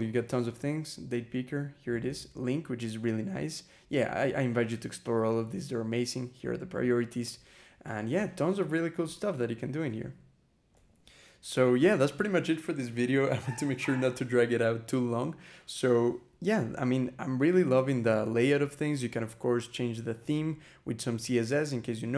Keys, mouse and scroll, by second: 1.1 scroll down 2, 2.8 scroll down 2, 3.7-4.5 scroll up 4, 5.4 scroll up 2, 6.9 click, 7.7 click, 8.2 scroll up 2, 9.2 click, 10.6 e, 11.6 a, 16.2 z, 22.0 a.